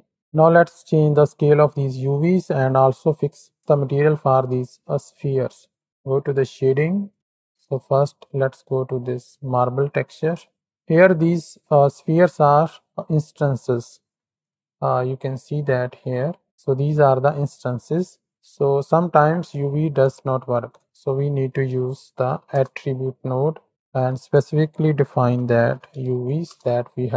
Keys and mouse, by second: 4.9 shift+middle click, 6.3 middle click, 7.0 shift+middle click, 7.1-7.9 drag, 8.8 click, 9.6 z, 14.5-15.5 drag, 16.0 click, 16.2 Tab, 17.2 click, 17.6 Tab, 20.5 shift+a, 21.7 t, 24.0-26.5 drag.